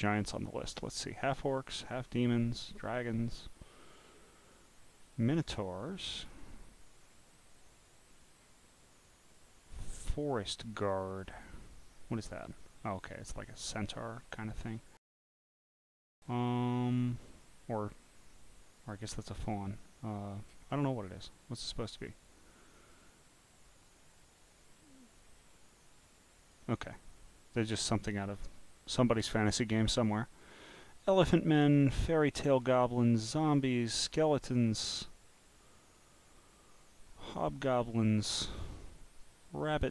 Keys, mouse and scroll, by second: 0.1-0.5 scroll down 1, 1.3 scroll down 2, 2.0-3.0 scroll down 2, 3.0 scroll down 1, 3.6-4.5 scroll down 1, 4.5-5.2 scroll down 2, 5.2 right click, 5.2 scroll down 1, 6.1 click, 7.0 scroll down 1, 7.8-9.0 scroll down 2, 11.1 click, 12.6-13.6 drag, 15.8 scroll down 1, 17.4 scroll up 4, 18.1 scroll up 2, 18.8 click, 20.7 scroll up 1, 22.7 click, 25.7 click, 28.0-28.6 scroll down 1, 29.9-30.2 scroll down 1, 32.6 scroll down 1, 35.3-35.6 scroll down 1, 38.7-39.3 scroll down 2.